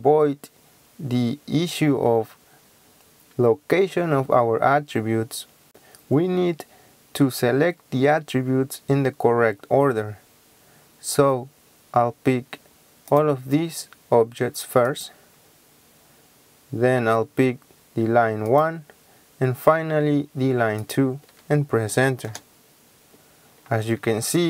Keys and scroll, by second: 22.3 Return.